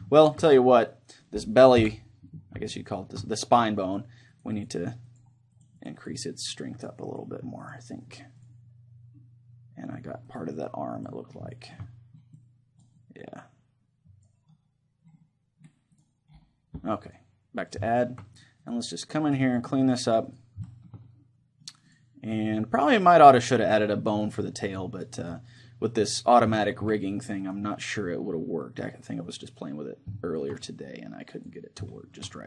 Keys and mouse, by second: 1.8 KP_1, 3.9-10.1 drag, 3.9 middle click, 11.1-12.1 drag, 11.5-13.5 middle drag, 12.4-14.7 drag, 14.5-17.7 middle drag, 16.0-29.3 drag, 17.9-19.9 middle drag, 20.7-22.8 middle drag, 23.0-24.0 middle drag, 25.0-26.4 middle drag, 26.7-29.0 middle drag, 29.3 middle click, 29.5-32.4 drag, 30.2-32.4 middle drag.